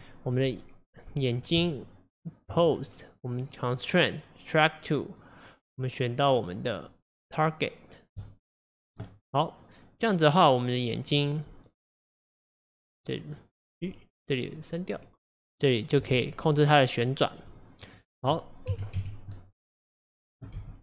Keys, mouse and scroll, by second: 0.0 click, 1.6 Tab, 3.4 click, 6.3-9.3 drag, 11.1 click, 15.0-16.1 drag, 16.1 g, 20.2 click, 20.6 g.